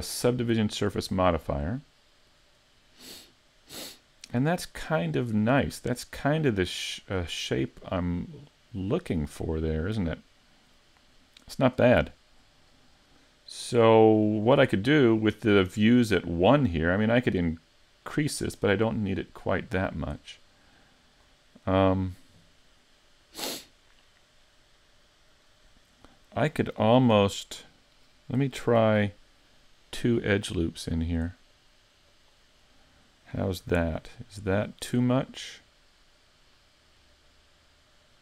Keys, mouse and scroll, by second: 0.5 click, 2.3 middle click, 12.1 shift+middle click, 12.6-13.1 scroll up 2, 13.1 middle click, 13.8 middle click, 17.5 click, 19.2 click, 21.6 middle click, 22.7 click, 26.1 middle click, 27.2 middle click, 28.8 ctrl+r, 32.3 click, 32.7 middle click, 33.7 a, 34.0-34.4 scroll down 4, 34.4 middle click, 34.9 Tab, 35.4 middle click.